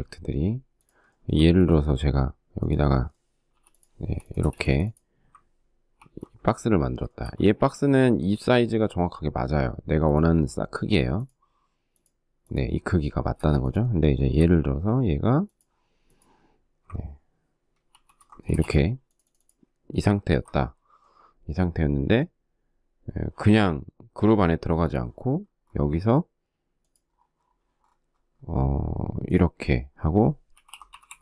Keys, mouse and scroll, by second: 0.5 shift+middle click, 3.8 p, 3.8 space, 5.4 ctrl+g, 5.6-6.4 ctrl+scroll, 6.5 shift+middle click, 12.8 space, 13.6 shift+middle click, 17.3 ctrl+shift+g, 17.9 space, 19.7 ctrl+g, 29.7-31.2 typing.